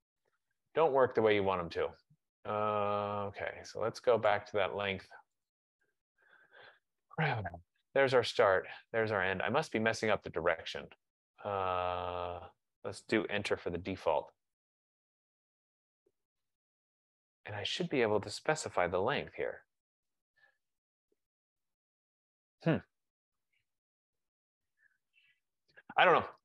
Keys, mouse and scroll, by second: 0.0-0.6 typing, 4.4 click, 5.7 click, 8.0 click, 9.1 click, 13.5 Return, 19.7 typing, 21.3 Return.